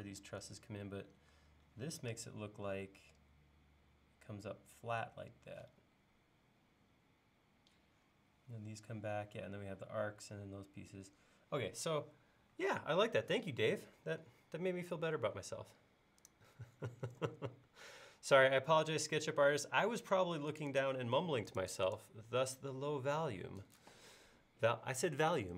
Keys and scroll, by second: 0.4 super+Tab.